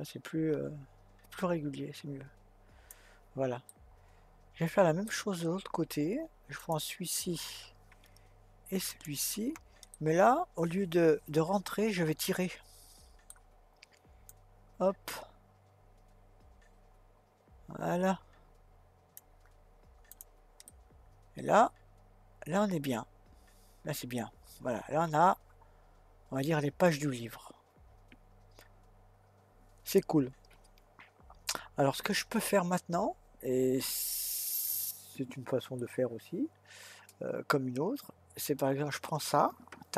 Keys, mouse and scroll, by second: 3.7-6.6 middle drag, 6.6 click, 8.9 shift+click, 9.9-13.1 middle drag, 14.3 click, 20.1 click, 20.7-23.8 middle drag, 38.4 click.